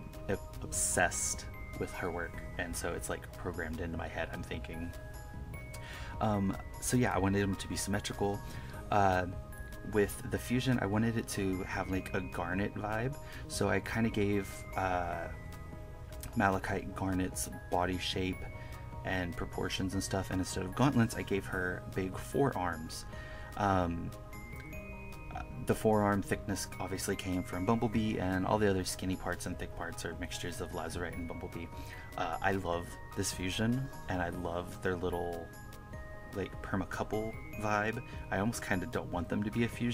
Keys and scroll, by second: 0.0 KP_Add, 4.8 1, 5.5 1, 6.3 1, 7.9 1, 11.3 1, 12.8 KP_Subtract, 13.7 KP_Add, 14.9 KP_Subtract, 17.2 1, 17.3 KP_Add, 17.8 1, 19.0 KP_Add, 20.5 KP_Subtract, 20.6 KP_Add, 20.8 KP_Subtract, 21.1 KP_Subtract, 21.2 KP_Add, 21.4 KP_Subtract, 21.6-24.1 typing, 24.5 KP_Subtract, 25.6 KP_Add, 27.8 KP_Subtract, 28.5 KP_Add, 29.8 KP_Subtract, 30.3 KP_Subtract, 30.4 KP_Add, 30.6 KP_Subtract, 31.8 1, 33.1 1, 34.0 1, 34.3 KP_Subtract, 36.3 1, 36.7 KP_Add, 38.7 KP_Subtract, 39.1 KP_Add, 39.3-39.9 typing.